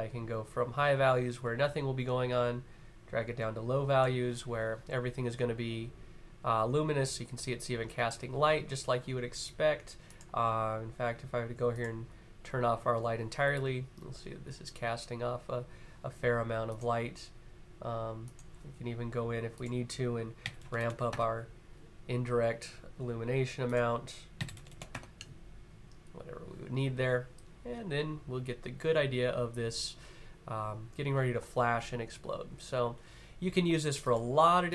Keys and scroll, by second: 19.8-20.9 typing, 23.8-24.9 typing.